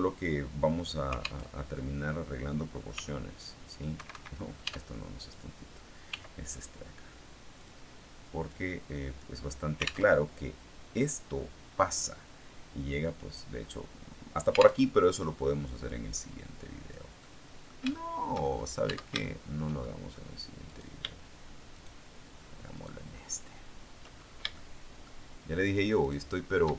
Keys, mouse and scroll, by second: 1.3 alt+Tab, 2.8 s, 3.8 Escape, 4.5 Tab, 5.0 right click, 6.0 s, 7.4 click, 8.4 click, 10.0 alt+Tab, 14.7 alt+Tab, 15.8-17.0 drag, 17.1 middle click, 17.8 shift+middle click, 18.4-18.9 shift+scroll up 1, 18.8 Tab, 19.1 shift+middle click, 19.7 shift+middle click, 20.6 right click, 21.6 shift+right click, 22.6 shift+right click, 24.0-24.4 shift+scroll up 1, 24.4-25.9 shift+middle drag, 25.9 shift+right click.